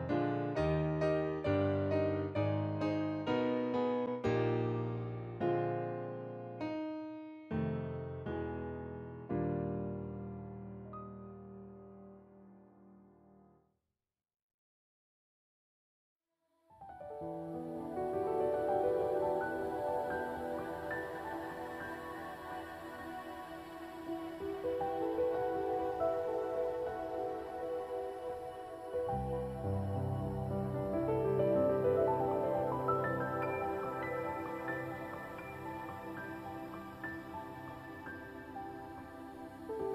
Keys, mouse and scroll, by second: 3.9 alt+click, 6.5 alt+right click, 6.8 alt+click, 14.0 scroll up 1, 17.8 click, 18.9 s, 19.1 click, 20.8 alt+click, 21.1 scroll down 1, 31.9 scroll up 1, 32.1 scroll down 1, 38.3 scroll up 1, 38.8 shift+click, 39.0 scroll down 1, 39.5 scroll up 1.